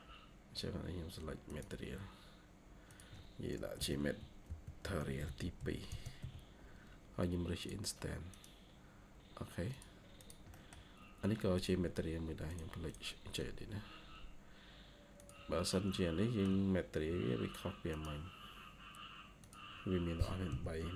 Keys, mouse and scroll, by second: 3.7-4.9 typing, 10.1 double click, 10.4 middle click, 12.8 double click, 13.2 scroll up 1, 15.6 middle click, 20.4 typing.